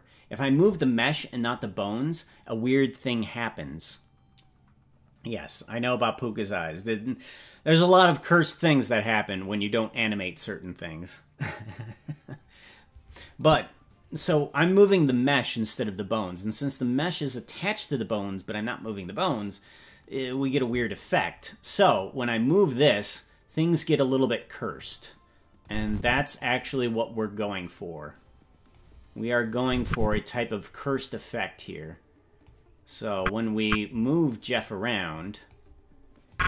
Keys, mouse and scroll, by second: 13.4 click, 21.9-24.8 drag, 25.6 click, 27.4-28.7 drag, 29.6 click, 31.3-32.5 drag, 33.1 click, 34.5-35.5 drag, 36.3 click.